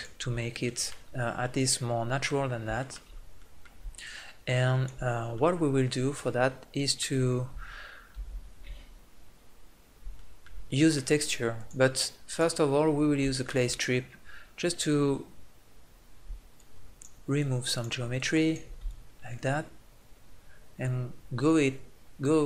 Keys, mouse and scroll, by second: 5.1 click, 5.6 middle click, 9.0 ctrl+z, 11.6-13.3 drag, 16.6-22.4 drag.